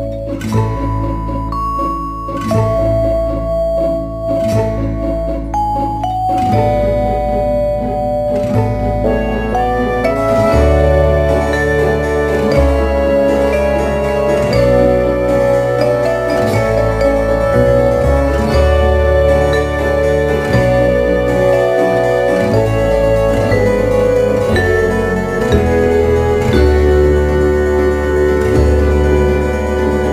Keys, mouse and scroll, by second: 4.9 shift+a, 24.9 a, 26.2 s, 28.3 click.